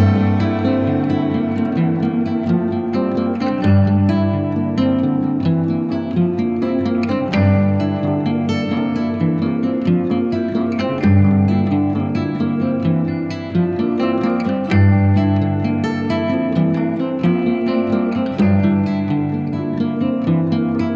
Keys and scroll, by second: 7.3 x, 10.6 [, 17.8 [.